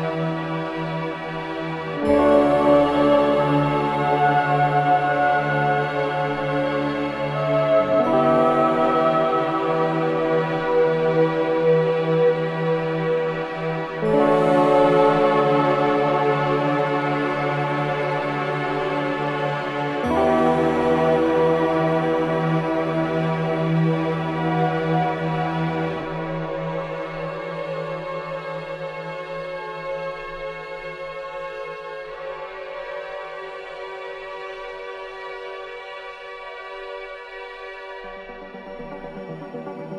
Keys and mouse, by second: 3.9 click, 5.3 Tab, 5.4 click, 6.4 z, 7.8-11.3 drag, 11.8 z, 14.7 g, 15.4 click, 26.4 click, 26.4 s, 29.9 Escape, 30.4-32.1 middle drag, 36.4 middle click, 37.7-38.8 middle drag, 38.8 z.